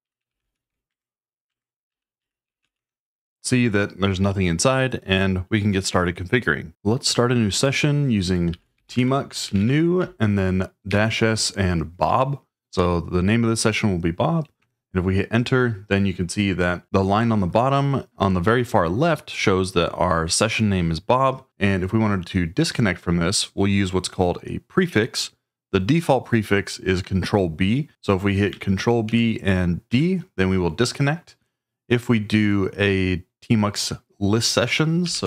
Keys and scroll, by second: 0.0-3.1 typing, 1.6 Tab, 8.2-10.1 typing, 10.9 Tab, 14.6 Return, 29.0 ctrl+b, 29.9 d, 34.8-35.2 typing.